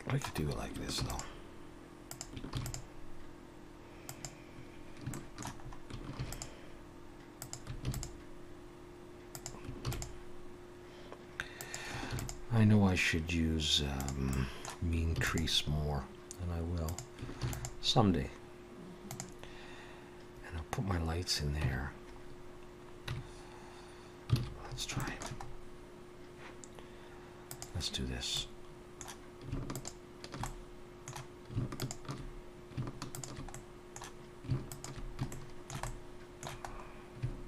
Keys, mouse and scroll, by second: 0.4 scroll up 1, 1.0 ctrl+r, 2.5 ctrl+r, 5.1 shift+middle click, 5.6-6.2 scroll up 2, 6.2 ctrl+r, 7.9 ctrl+r, 12.1 ctrl+r, 14.3 middle click, 15.2 ctrl+r, 17.4 ctrl+r, 21.6 Tab, 22.3-23.1 scroll down 2, 23.1 Tab, 24.4 alt+a, 24.7-25.9 scroll up 3, 25.0 shift+middle click, 27.5 click, 28.3 middle click, 29.7 alt+shift+click, 30.4 middle click, 31.8 alt+shift+click, 33.5 middle click, 34.7 alt+shift+click, 35.3 shift+middle click, 35.8 middle click, 36.7-37.2 scroll up 2, 37.2 scroll up 1.